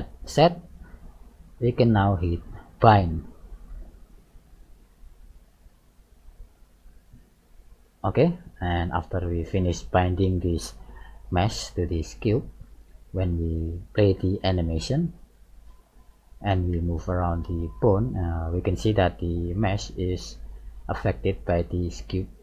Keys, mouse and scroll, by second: 3.5 click, 8.3 middle click, 10.0 shift+middle click, 11.3 right click, 12.1 right click, 12.6-13.0 scroll down 3, 13.9 right click, 15.3 click, 17.3 g.